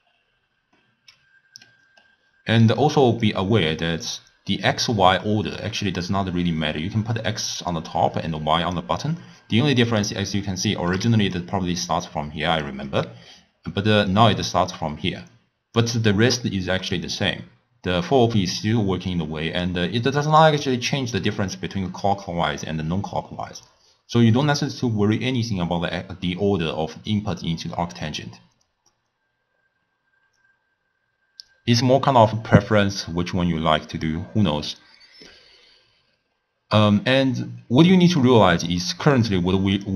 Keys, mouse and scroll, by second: 0.8-1.9 middle drag, 1.9-2.6 scroll up 1, 2.6-3.3 middle drag, 3.3 click, 5.1-5.6 scroll up 3, 5.6-6.7 middle drag, 6.7 click, 8.2 click, 10.0-10.7 scroll down 3, 10.7-11.1 shift+middle drag, 11.1 d, 11.4-12.7 drag, 12.7-14.0 d, 14.1-15.8 drag, 15.8 d, 15.9 d, 16.9-19.9 drag, 36.3 scroll down 5, 36.4-36.9 scroll up 1, 36.9-39.8 middle drag, 39.8 click.